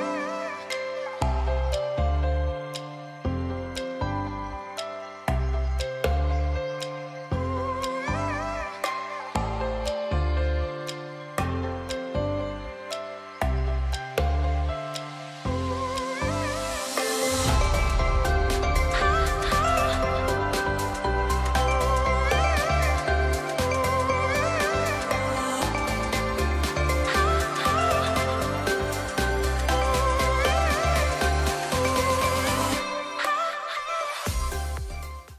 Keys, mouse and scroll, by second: 0.8-3.9 drag, 15.2 alt+Num_Lock, 15.2 click, 21.5 alt+Num_Lock, 21.5 alt+click, 21.8 alt+click, 30.3 ctrl+Num_Lock, 30.3 alt+click.